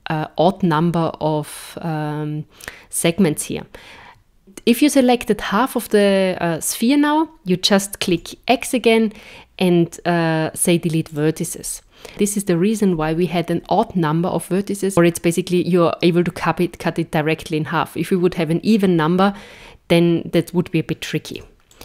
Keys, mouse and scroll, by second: 4.4 super+z, 8.1 x, 12.1 middle click, 13.0 KP_1, 21.3 b.